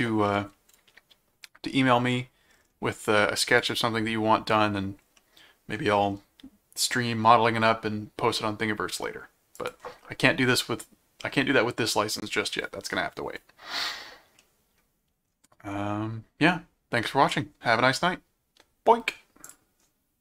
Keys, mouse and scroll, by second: 3.6 click, 5.2 middle click, 9.5 click, 14.4 middle click, 19.4 click, 19.8 scroll down 2.